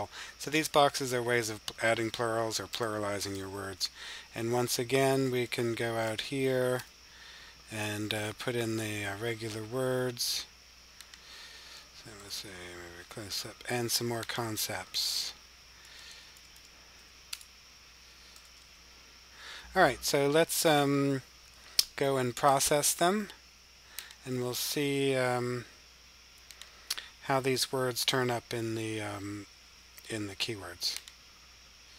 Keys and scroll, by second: 5.3-6.1 typing, 7.7-10.0 typing, 11.7-12.5 typing, 15.8-16.8 typing, 18.2 typing, 19.7-21.2 typing.